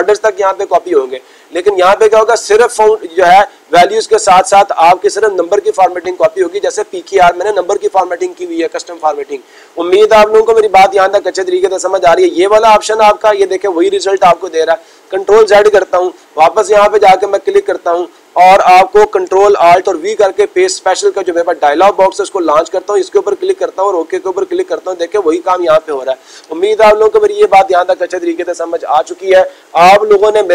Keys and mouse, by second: 11.9 click, 17.3 click, 18.1 click, 22.5-23.5 drag, 24.7-25.8 drag.